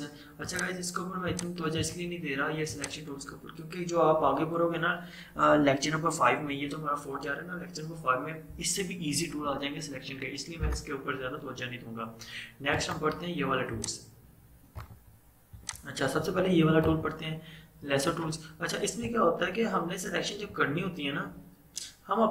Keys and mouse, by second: 0.5 right click, 0.6 click, 1.8 right click, 2.7 click, 12.8 right click, 13.8 click, 14.8 right click, 15.6 click, 15.7 click, 17.0 right click, 20.7-21.4 typing.